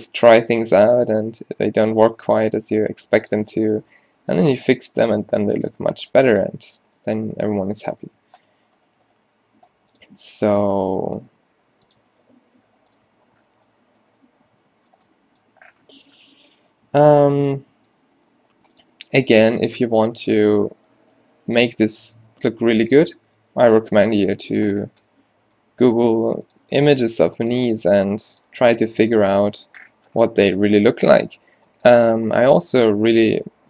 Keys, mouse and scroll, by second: 1.1 click, 1.3 q, 1.5 q, 2.1 g, 2.8 g, 4.0 g, 5.3 q, 5.4 q, 5.8 g, 8.3 Tab, 8.5 Tab, 9.2 click, 9.2 g, 11.6 g, 12.3 q, 12.5 q, 12.7 q, 13.2 Tab, 15.5 Tab, 18.2 middle click, 18.4 g, 21.3 g, 26.2 g, 27.0 g, 27.9 g, 29.0 Tab, 32.4 middle click, 33.2 Tab.